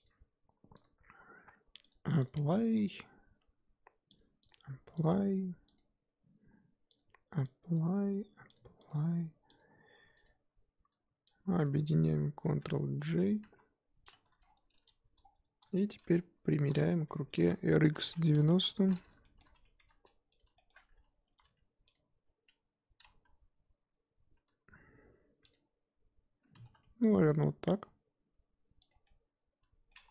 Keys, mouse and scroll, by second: 0.0 click, 0.8 click, 2.3 click, 2.5-2.9 scroll up 2, 4.5-5.0 drag, 5.7 click, 7.7-9.6 drag, 9.8-10.1 scroll down 2, 10.1 click, 11.6 click, 12.4 ctrl+j, 13.4 KP_1, 14.4 scroll down 1, 15.2-16.2 scroll down 8, 16.2 KP_7, 17.3 r, 18.7-19.2 scroll down 4, 19.2 shift+middle drag, 19.4-19.8 scroll up 1, 19.8 g, 20.5 shift+middle click, 20.7-21.2 scroll up 1, 21.2 r, 23.1 s, 29.0-30.1 middle drag.